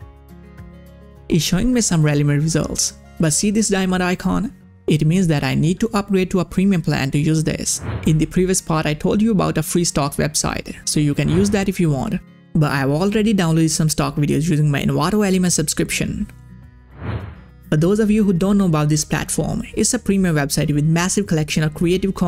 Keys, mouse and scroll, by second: 1.4-1.9 scroll down 1, 4.3 scroll up 1, 12.3 scroll up 1, 12.4 click, 13.8 click, 14.7 click, 15.5 click.